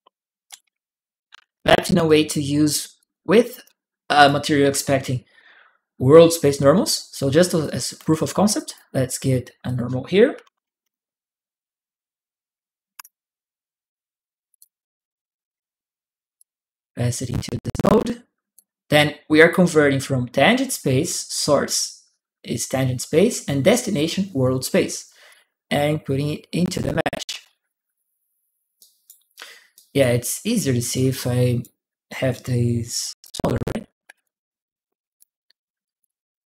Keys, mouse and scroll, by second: 0.2 click, 1.0 ctrl+w, 1.8 click, 2.7 click, 3.9 click, 4.8 right click, 6.7 right click, 7.4 click, 8.3 click, 9.4 click, 9.9-11.1 typing, 12.7 BackSpace, 12.8 Return, 14.3 click, 16.1 click, 17.4 click, 25.0-26.4 drag, 28.5 right click, 29.5 right click, 30.7 right click, 32.8 t, 32.9 click, 33.9 click, 34.7 u, 34.9 click, 34.9 u, 35.0 u, 35.6 click.